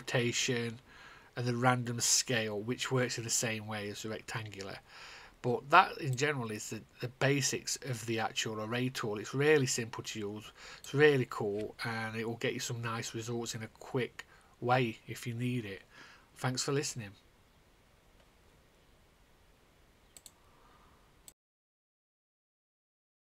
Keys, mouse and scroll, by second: 6.6 click, 13.8 click, 20.7 click.